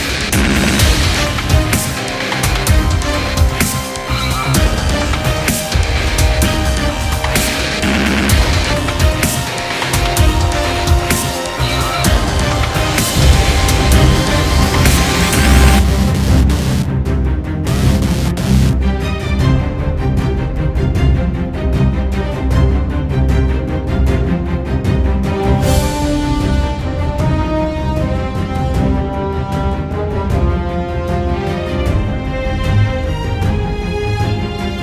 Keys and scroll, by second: 5.0 space, 6.0 space, 6.8 `.